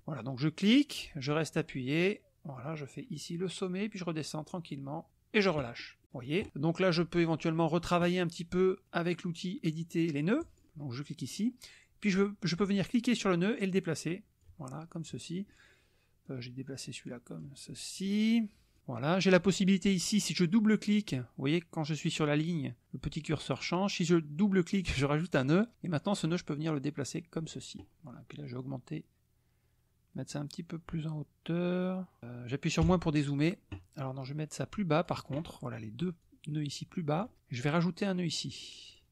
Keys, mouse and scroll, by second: 0.9-5.5 drag, 6.0 click, 10.4 click, 13.3-14.6 drag, 16.3-17.6 drag, 17.7 middle click, 24.7 click, 26.2-27.6 drag, 28.6-32.2 drag, 32.8 KP_Subtract, 34.3 click, 36.2-37.3 drag, 38.8 click.